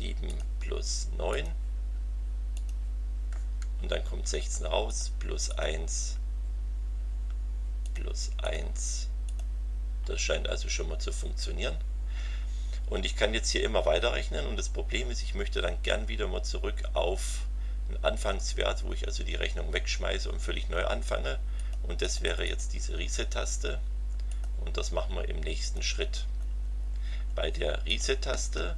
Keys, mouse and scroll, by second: 0.3 click, 1.3 click, 2.5 click, 4.9 click, 5.5 click, 7.8 click, 8.4 click, 9.2 click, 21.6 click, 22.0 click, 24.3 click, 25.6 click, 26.3-26.7 scroll down 2, 27.8 click, 28.3 Return.